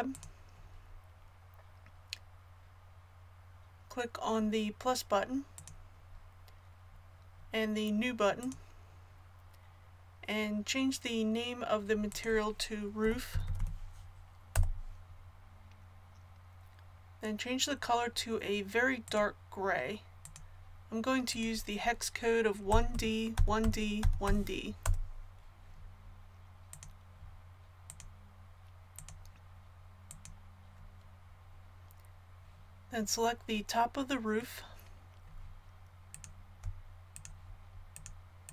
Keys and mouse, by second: 0.2-16.9 drag, 13.4 o, 19.1-38.5 drag.